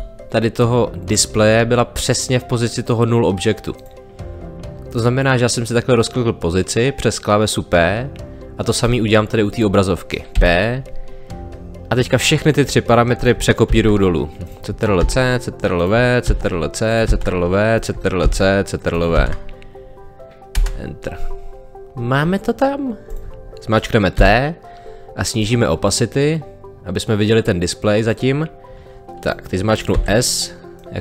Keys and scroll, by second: 10.3 p, 13.7 ctrl+c, 15.0 ctrl+v, 16.3 ctrl+c, 17.1 ctrl+v, 20.5 Return, 24.1 t, 29.9 s.